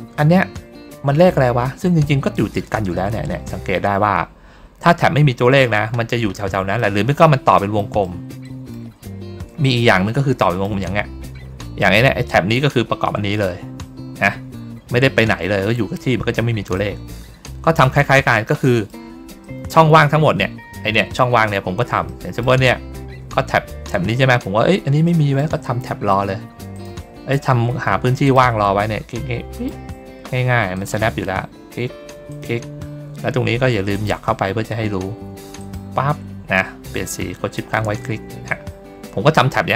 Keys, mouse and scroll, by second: 6.7 middle click, 7.7 middle click, 8.3 middle click, 8.9 ctrl+scroll down 1, 9.5 middle click, 10.3 middle click, 10.7 ctrl+middle click, 16.6 middle click, 17.3 middle click, 18.5 middle click, 19.3 middle click, 20.0 ctrl+scroll up 1, 22.0 middle click, 22.5 ctrl+scroll down 2, 24.3 ctrl+scroll down 2, 24.9 ctrl+middle click, 26.6 ctrl+click, 28.1 ctrl+click, 29.4 ctrl+click, 30.6 ctrl+click, 32.2 ctrl+click, 33.8 ctrl+click, 35.5 ctrl+click, 37.5 ctrl+shift+click, 38.4 ctrl+middle click, 38.6 ctrl+middle click.